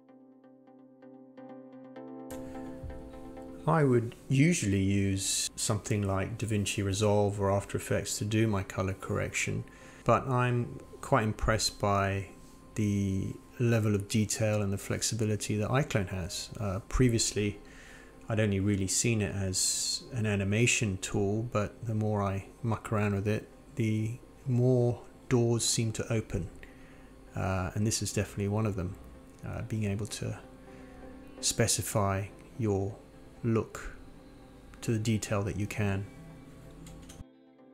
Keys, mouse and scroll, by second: 0.0 click, 3.0 click, 5.0 click, 7.0 click, 8.0-10.5 drag, 10.7-11.4 drag, 11.6 click, 11.8-14.6 drag, 14.8 click, 16.7-17.9 drag, 19.7 click, 20.3 click, 23.5-25.7 drag, 25.9 click, 26.1 click, 26.5 click, 26.7 click, 28.0 click, 28.9-31.3 drag, 31.7 ctrl+z, 32.2 click, 33.6-34.5 drag, 34.6 ctrl+z, 35.0-35.6 drag, 35.9 scroll down 1, 36.3-36.8 scroll up 1, 37.6 click, 37.6 scroll down 1.